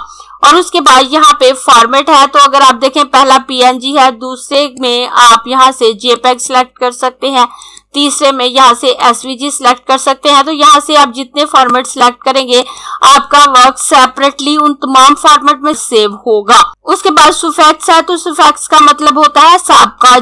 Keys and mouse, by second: 3.6 click, 10.6 click.